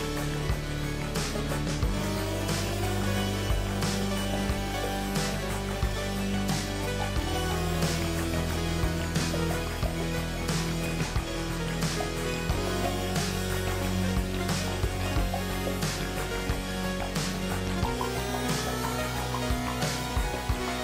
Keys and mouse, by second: 5.9 click, 8.9 ctrl+r, 10.8 click, 11.3 g, 14.4 ctrl+r, 16.4 k.